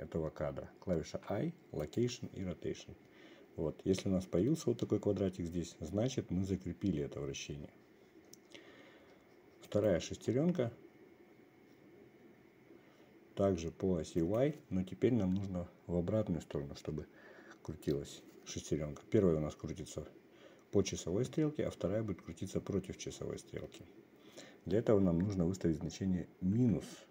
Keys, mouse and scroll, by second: 1.6 i, 10.2-11.9 drag, 14.9-27.1 drag.